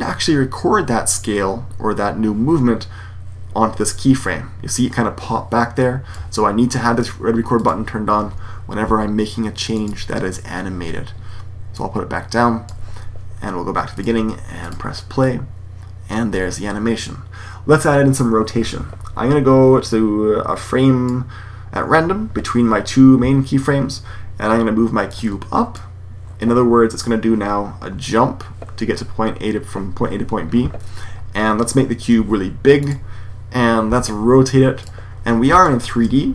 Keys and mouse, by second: 8.7 s, 15.2-16.0 drag, 16.2 Escape, 25.8-26.9 drag, 32.1 s, 33.8 r, 35.6-36.3 drag.